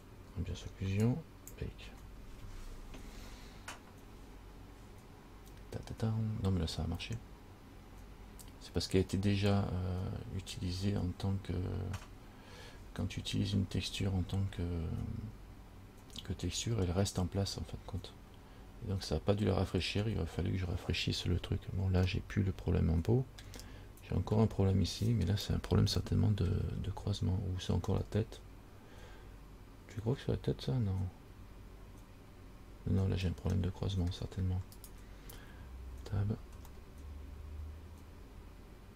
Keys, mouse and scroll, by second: 1.3 click, 22.3 middle click, 24.1-24.6 scroll up 5, 26.2 shift+middle click, 27.0-27.7 scroll up 3, 28.2 middle click, 33.8 shift+middle click, 35.0 right click, 36.1 Tab, 37.0 middle click.